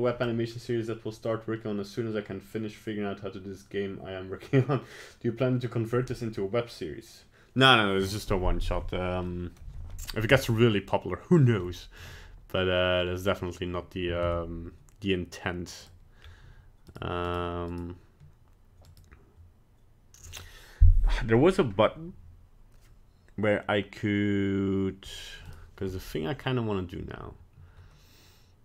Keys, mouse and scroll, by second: 9.3 middle click, 10.0 middle click, 10.3 middle click, 11.5 middle click, 11.7 middle click, 13.0-13.3 scroll down 2, 14.2 ctrl+Tab, 16.2 scroll up 1, 16.9 right click, 17.3 right click, 17.7 right click, 18.9 right click, 25.5 right click.